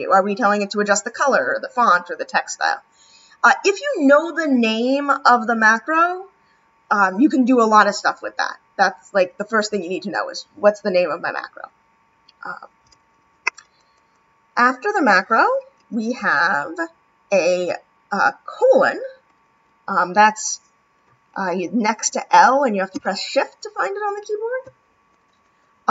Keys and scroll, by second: 22.9 shift+;.